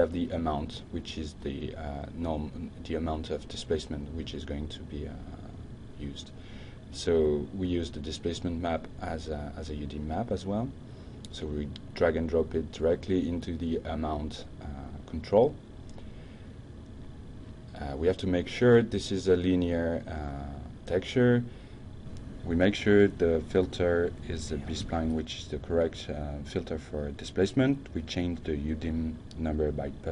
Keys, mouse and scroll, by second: 5.2-7.2 drag, 8.8-10.7 drag, 14.4 click, 20.5 click, 21.6 click, 25.9 click, 27.1 shift+Right, 27.7 shift+Right, 28.8 d, 29.2 Return.